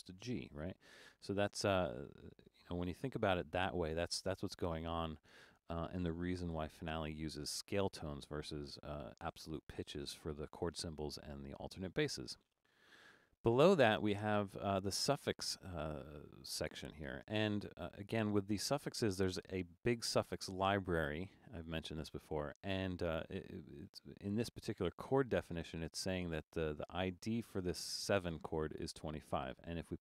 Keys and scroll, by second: 3.3 super+z, 6.6 Return.